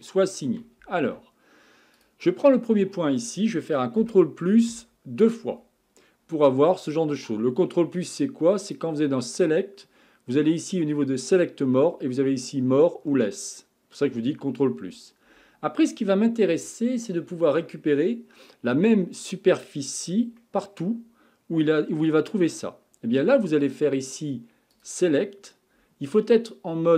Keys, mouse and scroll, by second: 0.0-1.1 shift+middle drag, 1.1 Tab, 2.0 click, 4.0 ctrl+KP_Add, 4.7 ctrl+KP_Add, 8.7-11.8 drag, 20.4-23.4 middle drag, 24.7-26.9 drag.